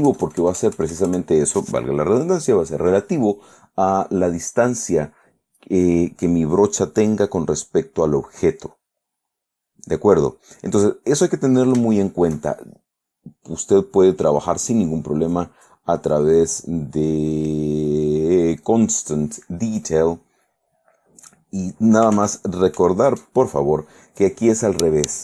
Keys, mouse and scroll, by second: 0.1 KP_Add, 10.1-11.4 middle drag, 13.7 click, 16.3 click, 18.8 click, 21.1 click, 22.3 ctrl+z.